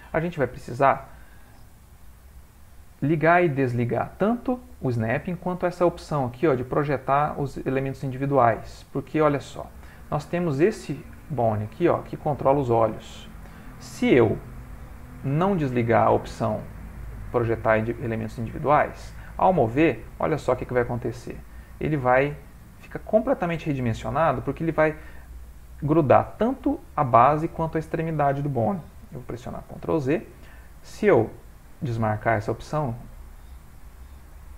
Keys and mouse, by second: 0.8 click, 9.8 middle click, 10.2 ctrl+middle click, 10.9 middle click, 11.5 click, 11.9 middle click, 15.8 click, 17.9 middle click, 19.2 g, 20.6 ctrl+middle click, 21.2 shift+middle click, 21.9 ctrl+middle click, 22.5 middle click, 28.5 ctrl+middle click, 29.2 ctrl+z, 31.1 click, 34.3 g.